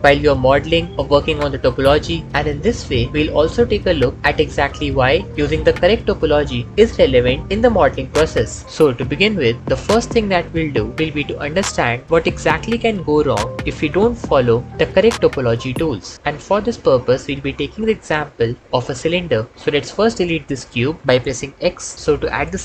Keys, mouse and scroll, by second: 0.2 ctrl+z, 0.5 shift+a, 1.3 ctrl+b, 3.5 Tab, 4.0 ctrl+shift+z, 4.8 Tab, 20.9 x.